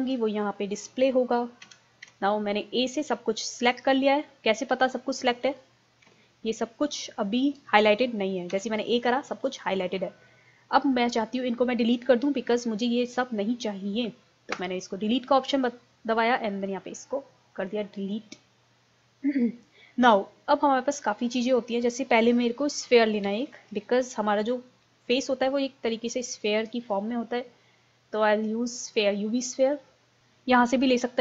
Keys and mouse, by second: 1.7 a, 2.1 a, 6.1 a, 8.5 a, 14.6 Delete, 17.7-20.6 drag, 25.0 shift+a.